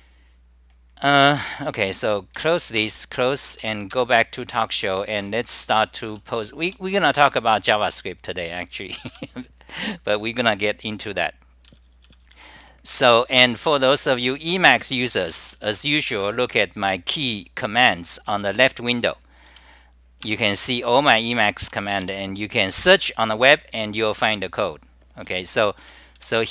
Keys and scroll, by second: 13.5-16.2 typing, 21.4-22.5 typing, 25.7-26.5 typing.